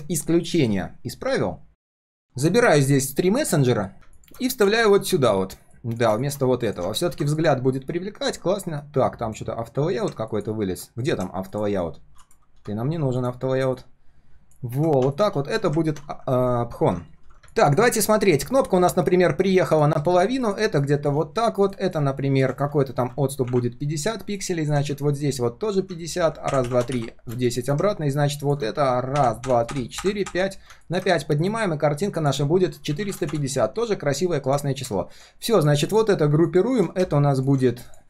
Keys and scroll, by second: 1.7 ctrl+c, 4.6 ctrl+v, 15.9 ctrl+g, 16.7 ctrl+r.